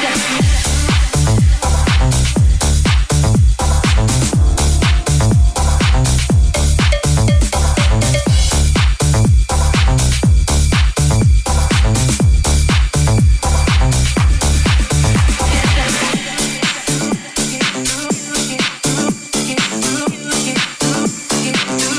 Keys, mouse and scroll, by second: 0.4 right click, 1.7 right click, 4.3 e, 5.0 w, 8.2 e, 8.9 r, 9.4 g, 17.4 middle click, 18.8 KP_1, 20.5 alt+z, 21.3 alt+z.